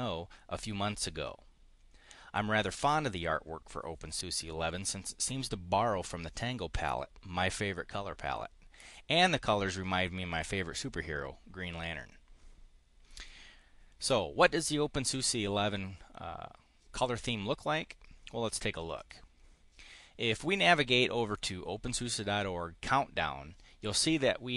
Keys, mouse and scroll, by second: 18.8 click.